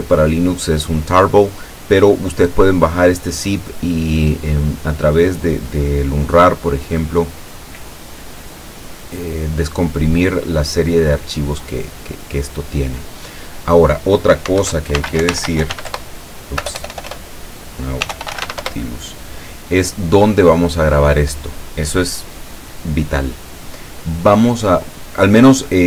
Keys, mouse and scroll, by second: 14.6 alt+F2, 15.0 alt+n, 15.2 alt+a, 15.3 alt+u, 15.4 alt+t, 15.5 alt+l, 15.7 alt+u, 15.8 alt+s, 16.0 alt+Return, 16.7 BackSpace, 17.8-19.0 typing, 20.8 click.